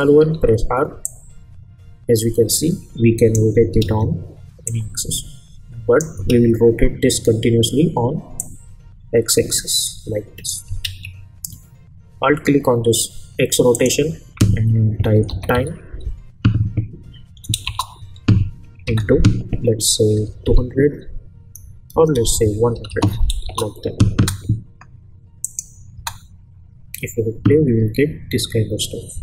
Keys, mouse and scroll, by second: 0.3 r, 1.0-3.5 drag, 3.8 ctrl+z, 4.6-6.2 drag, 6.3 ctrl+z, 8.4-10.6 drag, 10.8 ctrl+z, 13.7 alt+click, 14.9-16.0 typing, 17.6 Return, 18.8 shift+8, 19.9-20.9 typing, 22.2-22.9 typing, 23.4 Return, 24.1 space, 25.4 click, 25.9 space.